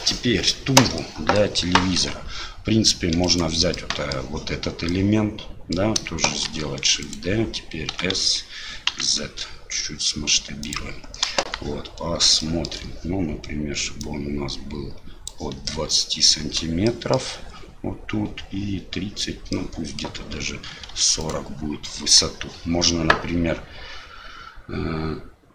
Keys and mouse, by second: 1.0-1.4 middle drag, 2.0 Tab, 3.1 3, 3.2 click, 3.7 middle click, 4.9 middle click, 6.5 shift+d, 8.0 s, 11.3 KP_1, 12.5 shift+middle click, 14.0-15.3 drag, 16.9 shift+click, 19.6 middle click, 21.2 click.